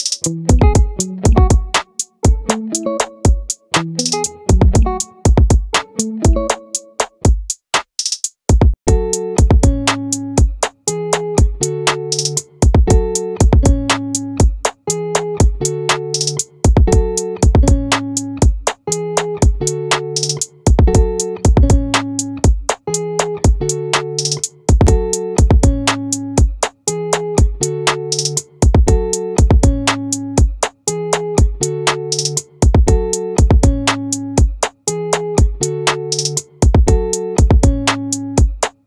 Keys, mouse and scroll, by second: 5.0-6.4 right drag, 9.8 ctrl+z, 10.0 ctrl+z, 13.8-18.0 right drag, 18.2-19.4 right drag, 21.4-24.0 right drag, 24.0-25.6 middle drag, 31.9-33.5 drag, 34.7-38.8 drag.